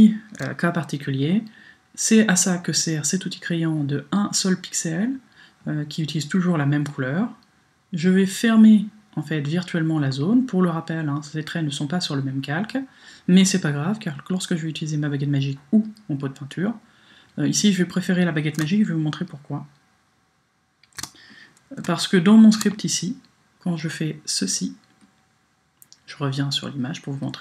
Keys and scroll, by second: 18.7 super+space, 21.8 space.